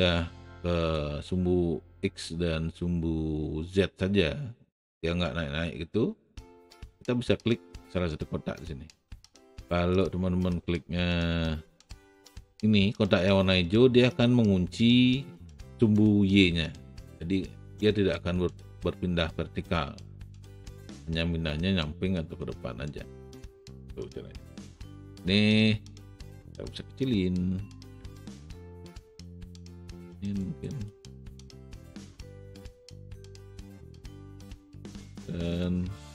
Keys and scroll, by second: 25.2 r.